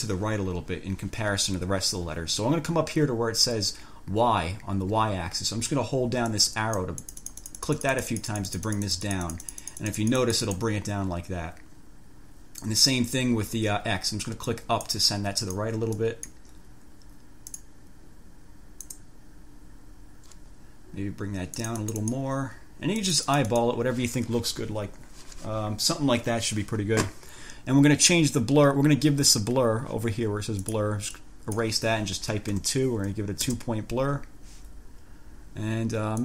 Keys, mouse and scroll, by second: 6.5 click, 14.7-15.9 drag, 16.1 click, 17.7 click, 19.1 click, 21.7 click, 23.2 click, 30.9 click, 31.4 click, 32.7 2, 33.7 Return.